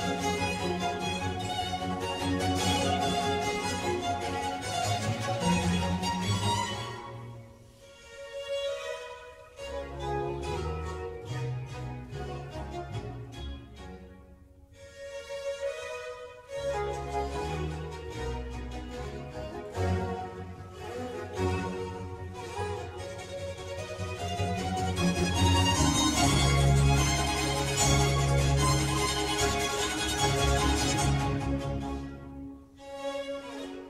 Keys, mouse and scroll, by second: 2.3 Tab, 3.0 Tab, 3.4-4.8 middle drag, 4.8 scroll up 2, 5.4-6.9 shift+middle drag, 6.9-7.6 scroll down 2, 7.6-8.4 middle drag, 8.4 click, 9.1 g, 10.3 Tab, 11.1-17.8 typing, 18.8 Return, 19.1-24.1 typing, 25.3 space, 25.4 n, 25.5 o, 25.6 w, 25.9 Return, 26.9-28.3 typing, 31.6-33.8 typing.